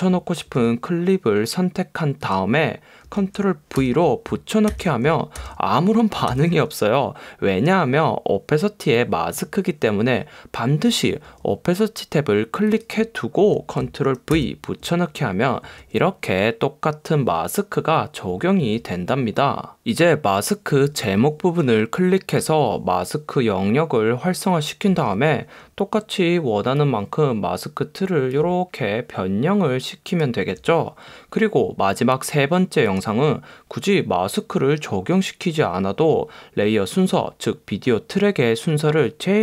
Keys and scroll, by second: 3.9 super+v, 4.8 super+v, 5.5 super+v, 6.4 super+v.